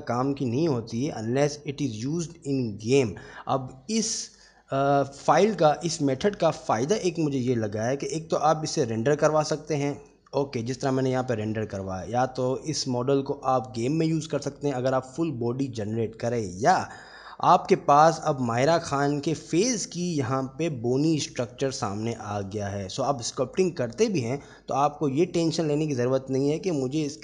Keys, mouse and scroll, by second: 3.8 shift+middle click, 6.1 Tab, 6.9 shift+middle drag, 8.4 click, 11.0-12.2 middle drag, 16.7-17.1 middle drag, 18.0 Tab, 18.4 Tab, 19.0-19.4 middle drag, 23.1-24.5 middle drag, 26.8-27.2 middle drag.